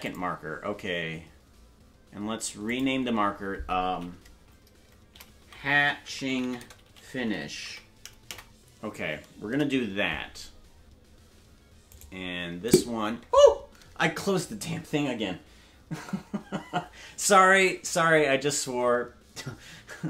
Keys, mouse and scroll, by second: 0.0-10.2 drag, 12.9 right click.